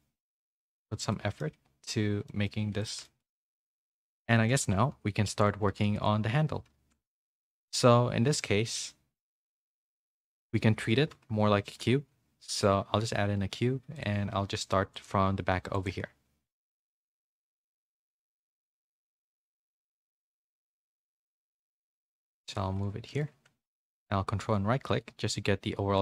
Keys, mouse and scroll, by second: 1.1 scroll up 1, 1.9 2, 2.3 scroll up 1, 2.4 middle click, 2.8 alt+click, 3.0 middle click, 3.4-5.7 typing, 5.3 shift+middle click, 6.7 shift+a, 9.5 middle click, 11.1 KP_3, 11.6 shift+a, 13.4 s, 14.4 r, 15.1 g, 15.9 s, 17.0 shift+middle click, 17.5-22.6 typing, 18.0 Tab.